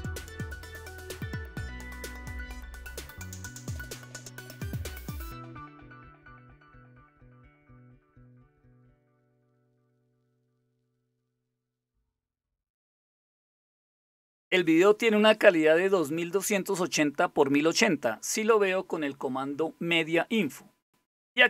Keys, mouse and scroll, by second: 0.1 Return, 1.6-8.9 typing, 9.3 Tab, 10.0 BackSpace, 10.2 Tab, 11.0-11.8 typing, 12.3 Return, 14.4-15.1 typing, 21.4 click.